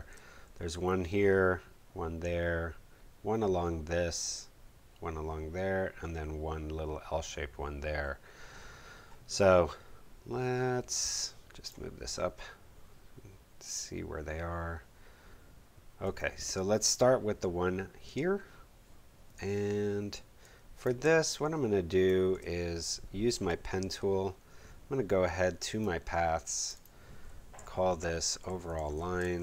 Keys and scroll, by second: 20.1 space, 28.1-29.4 typing.